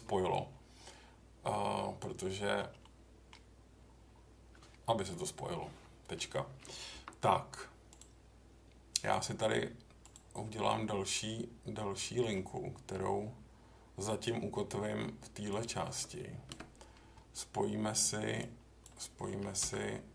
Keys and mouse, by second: 2.8 middle click, 6.9 k, 18.5-18.8 drag, 19.6 j.